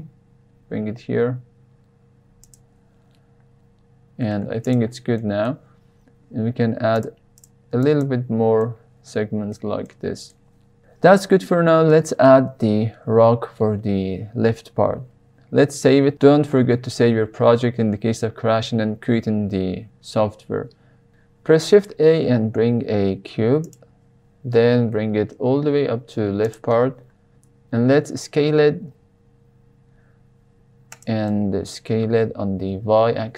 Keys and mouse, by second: 2.4 click, 5.1-5.4 middle drag, 6.9 click, 7.9 click, 8.6-9.5 middle drag, 9.8-10.3 middle drag, 11.8-12.3 middle drag, 15.8 ctrl+s, 21.1 x, 21.1 shift+a, 21.7 shift+a, 24.9 g, 25.3 x, 26.4 click, 28.8 s, 30.9 drag, 31.2-31.6 middle drag, 32.1 s, 32.6 y.